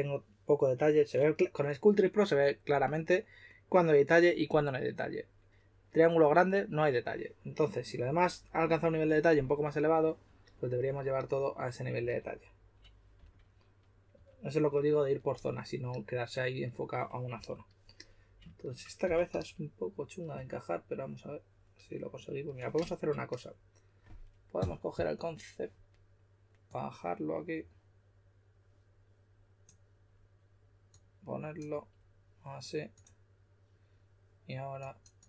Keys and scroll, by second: 11.9 s, 13.1-14.6 typing, 17.3 typing, 19.0 typing, 20.3 typing.